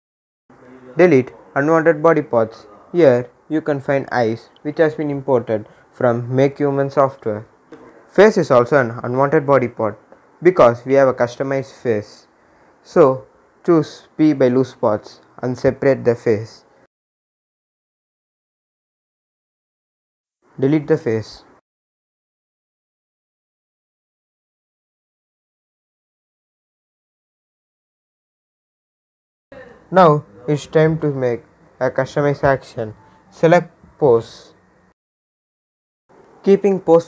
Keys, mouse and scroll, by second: 4.3 right click, 5.4 click, 13.0 click, 23.4 scroll down 1, 26.5 click, 27.0 scroll down 1, 28.2-30.1 drag, 30.3 scroll down 1, 32.4 click, 36.3 click, 36.4-37.0 scroll down 1.